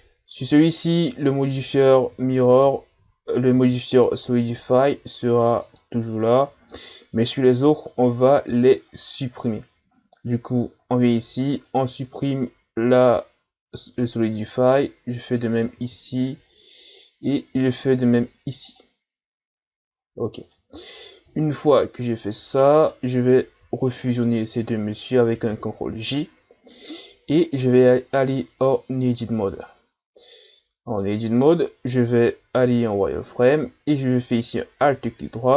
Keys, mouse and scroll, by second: 0.6-2.5 scroll up 10, 2.5 Tab, 3.5 ctrl+r, 6.3 Tab, 6.6-7.4 scroll down 1, 7.4 right click, 11.7-12.9 drag, 12.9 right click, 15.1 click, 15.7-16.5 scroll down 6, 16.5-17.1 scroll up 1, 17.3 right click, 18.7-19.9 drag, 19.9-20.5 ctrl+scroll up 2, 20.5-21.3 middle drag, 21.3-22.8 scroll up 11, 22.8 right click, 23.9 shift+right click, 25.5 ctrl+j, 27.1 Tab, 27.8-29.0 scroll up 1, 29.0 scroll up 1, 29.0-30.5 middle drag, 30.5-31.0 scroll up 1, 31.0-32.6 middle drag, 32.6 z, 34.4 alt+right click.